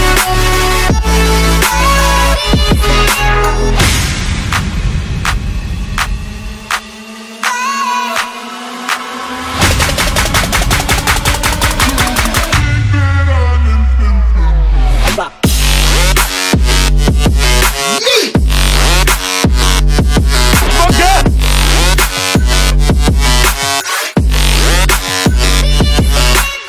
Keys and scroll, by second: 2.5 Return.